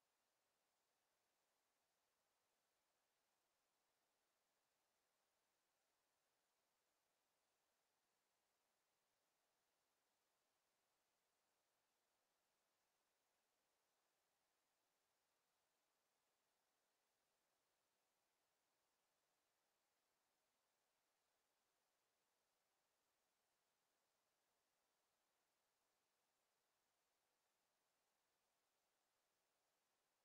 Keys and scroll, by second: 12.1 Delete, 19.0 w.